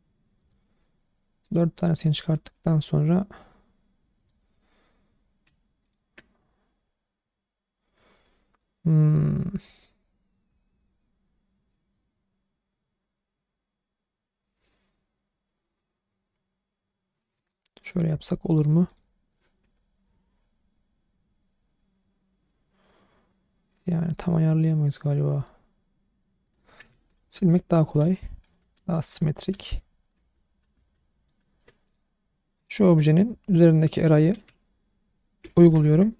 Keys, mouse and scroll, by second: 0.4-1.4 right drag, 1.4 click, 2.5 r, 4.2 right click, 5.8 shift+click, 10.5 r, 17.4 click, 18.5 click, 18.9 click, 19.6 r, 26.4 right click, 27.0 ctrl+z, 27.2 ctrl+z, 27.5 ctrl+z, 28.0 ctrl+z, 28.4 ctrl+z, 28.7 ctrl+z, 29.2 ctrl+z, 29.5 ctrl+z, 30.1 ctrl+z, 30.7 ctrl+z, 31.9 click, 32.6 click, 33.9 click, 35.4 ctrl+a.